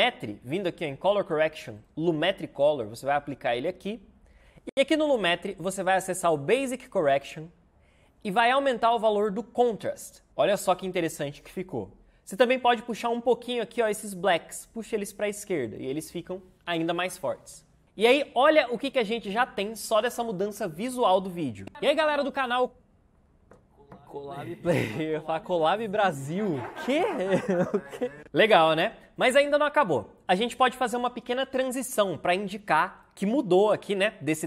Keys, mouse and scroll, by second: 12.0 ctrl+z, 21.7 space, 28.0 space.